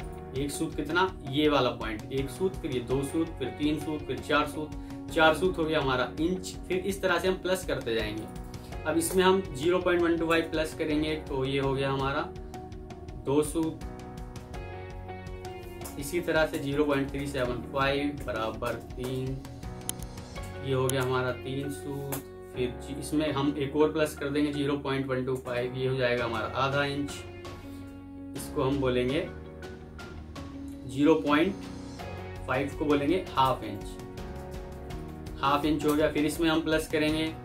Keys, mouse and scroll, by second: 8.9 double click, 10.1-11.8 typing, 14.2-15.3 typing, 15.7 Return, 16.4-19.2 typing, 20.8-21.7 typing, 22.0 Return, 25.2-26.2 typing, 27.7 typing, 33.4-35.1 typing, 35.7 Return, 36.7 alt+Down, 36.9 alt+Down.